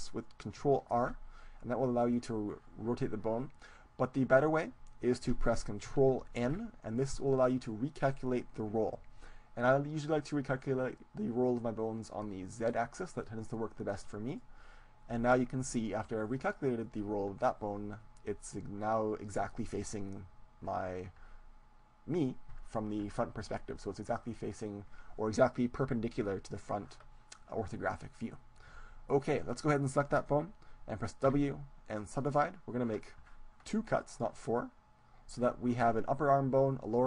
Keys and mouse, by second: 0.9 ctrl+r, 4.5-6.3 right drag, 6.5 ctrl+n, 29.5-31.5 right drag, 31.3 w, 33.9-36.2 drag.